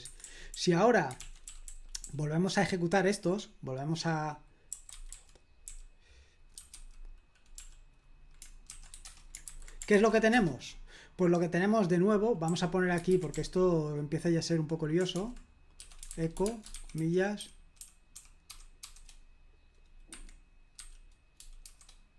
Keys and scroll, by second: 0.0 Escape, 0.2-2.0 typing, 1.2 super+l, 4.5-7.5 typing, 8.6-9.4 typing, 9.4 super+h, 9.9 ctrl+p, 10.3 Return, 12.5 k, 13.1 super+l, 13.3 k, 15.1-18.7 typing, 20.1 Escape, 20.8-22.1 typing.